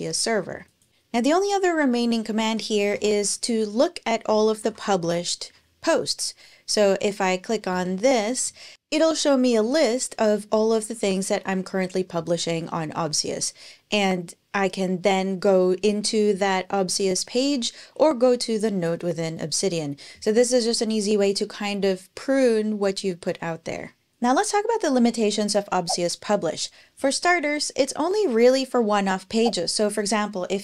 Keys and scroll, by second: 2.1-5.3 typing, 7.5 Return.